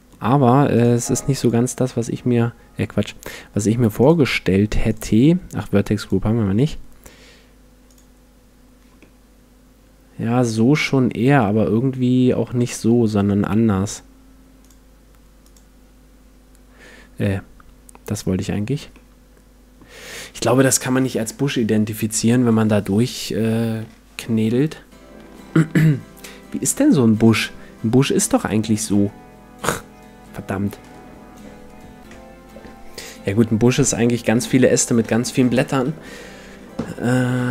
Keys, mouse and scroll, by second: 0.7-2.6 drag, 1.9-4.8 middle drag, 3.2-6.8 drag, 7.9-9.7 drag, 9.0-10.8 middle drag, 14.6-16.4 drag, 18.1-19.7 drag, 18.9-37.5 middle drag.